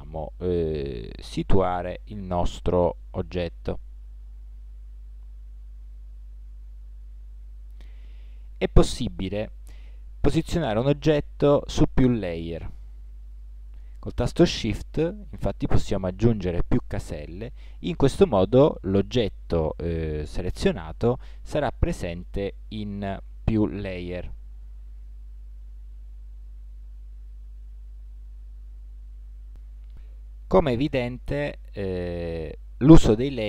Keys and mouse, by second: 11.5 m, 22.8-29.1 drag.